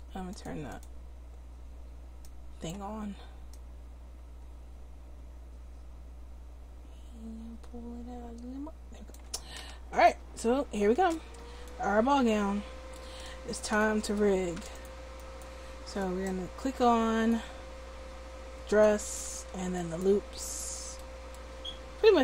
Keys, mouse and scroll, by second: 0.3-2.8 drag, 3.5-9.1 drag, 9.4 Tab.